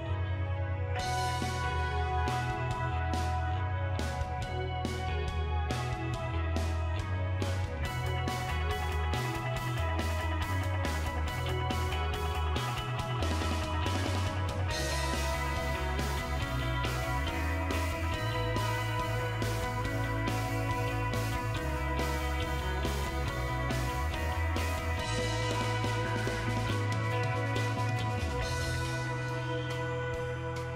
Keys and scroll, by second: 24.5-26.3 typing.